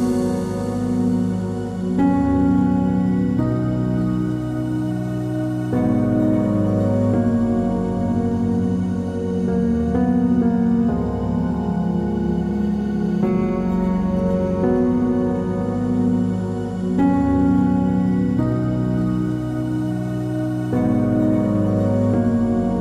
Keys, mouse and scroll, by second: 1.5 click, 1.9 click, 2.4 click, 3.4-3.9 scroll down 1, 3.9 click, 4.1-4.8 scroll down 1, 6.3 click, 6.9 click, 7.4 z, 7.8 middle click, 8.3 click, 8.6 click, 10.1-12.2 middle drag, 10.5-11.7 scroll down 2, 11.7 KP_7, 12.8 z, 13.5 middle click, 15.4 KP_7, 15.6 scroll down 1, 16.8 middle click, 17.3 click, 17.6 click, 18.1 g, 18.8-19.2 middle drag, 19.2 click, 19.4 scroll up 1, 19.9 KP_7, 20.2 scroll up 1, 20.6 shift+d, 21.9 KP_0, 22.2 z.